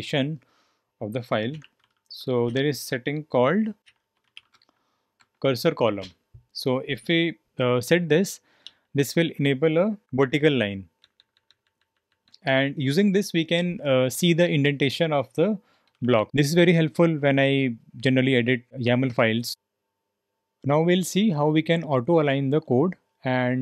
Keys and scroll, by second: 1.0-2.5 typing, 3.5-6.5 typing, 8.4-11.8 typing, 15.8-16.1 typing, 19.2-20.0 typing.